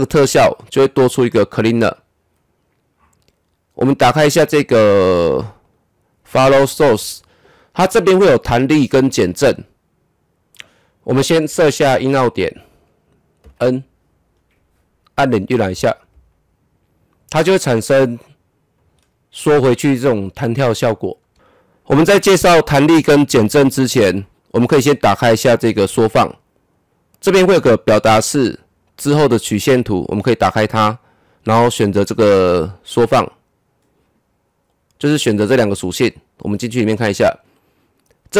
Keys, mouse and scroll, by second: 1.2 double click, 3.9 click, 10.5-13.4 drag, 13.4 n, 15.2 KP_0, 18.7-21.3 drag, 25.8 click, 25.9 click, 30.1 click, 32.7 click, 36.7 click.